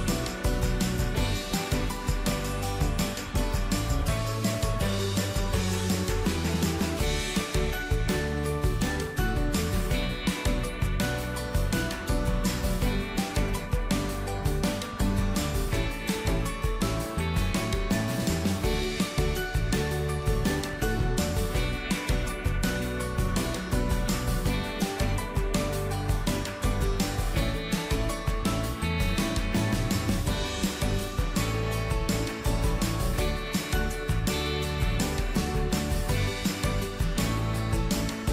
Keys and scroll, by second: 27.1 ctrl+d.